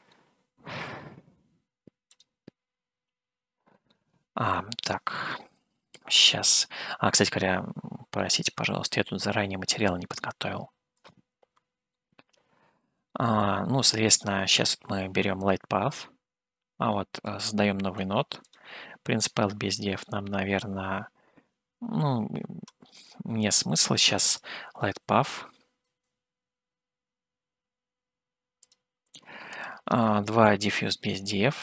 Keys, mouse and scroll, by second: 0.1 middle click, 2.1 click, 4.0 middle click, 6.7 Home, 7.3-8.2 scroll up 4, 8.2-9.8 middle drag, 11.1 click, 12.1-13.2 shift+middle drag, 14.5 shift+a, 17.2 click, 18.4 click, 21.8 Delete, 22.9 shift+a, 31.0 shift+a.